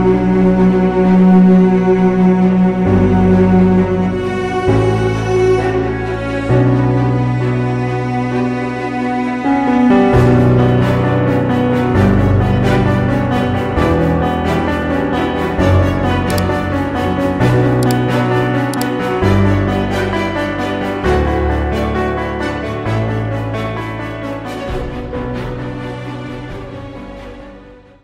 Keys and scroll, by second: 10.2 ctrl+0.